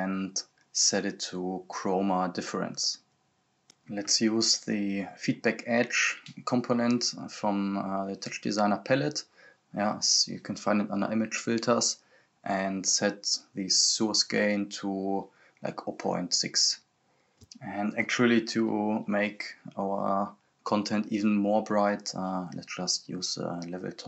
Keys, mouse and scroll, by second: 0.7-1.1 scroll up 1, 1.8-3.1 drag, 3.1-3.7 scroll down 1, 3.7 click, 4.0-4.4 scroll down 1, 4.4 click, 4.6-5.6 scroll down 1, 5.6 click, 7.5-14.0 drag, 16.0-18.1 drag, 18.1-18.7 scroll up 1, 18.7 click, 19.5 right click, 19.8-20.7 typing, 22.5 scroll up 1, 23.7-24.0 drag.